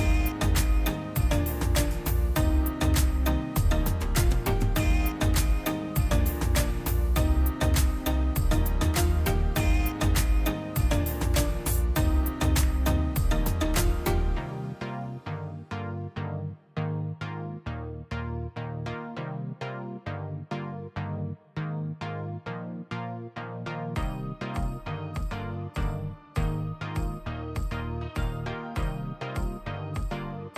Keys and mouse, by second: 2.8 middle click, 4.0-4.6 middle drag, 4.6 click, 5.5-7.1 drag, 8.1 middle click, 9.0 drag, 9.8-10.5 middle drag, 10.5 click, 11.0-12.5 middle drag, 12.5 click, 13.7 click, 15.4 drag, 17.5 middle click, 18.0 click, 18.4 shift+a, 20.6 ctrl+shift+click, 21.0-21.3 middle drag, 21.4 click, 21.9 ctrl+t, 22.5 click, 22.7-23.6 middle drag, 23.6 drag, 24.5-25.9 drag, 28.0-30.5 drag.